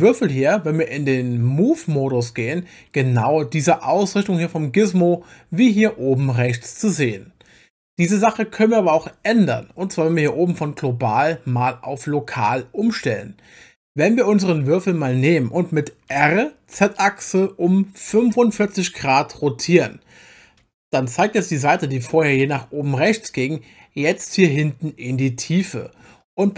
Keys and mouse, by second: 0.0 click, 1.7 click, 16.1 r, 16.7 z, 18.1 4, 18.5 5.